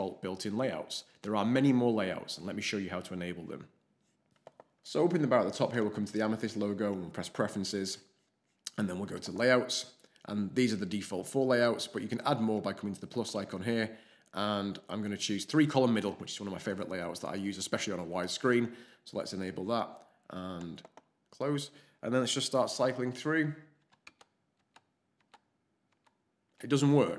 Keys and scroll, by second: 24.0 alt+shift+space, 24.5 alt+shift+space, 25.2 alt+shift+space.